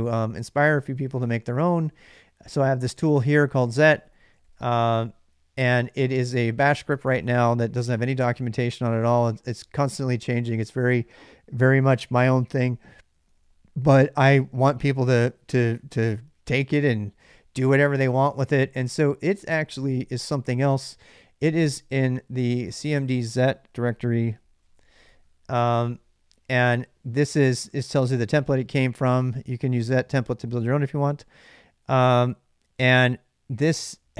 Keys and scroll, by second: 1.2-2.1 typing, 3.7-7.7 typing, 6.5 ctrl+[, 6.6 ctrl+j, 8.7-10.9 typing, 13.0 ctrl+[, 13.0 ctrl+j, 13.5-16.5 typing, 14.2 ctrl+[, 15.6 ctrl+[, 17.0 ctrl+[, 17.3 ctrl+j, 18.3 shift+z, 18.5 shift+z, 19.4 alt+Tab, 23.5-25.1 typing.